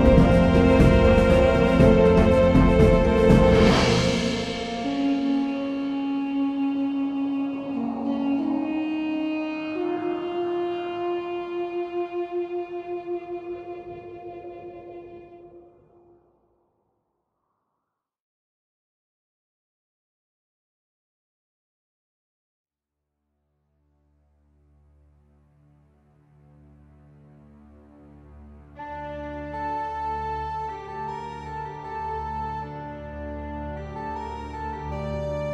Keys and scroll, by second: 5.4 super+c, 7.4 super+v, 11.6 super+t, 17.9 Return, 24.5 space, 24.9 space.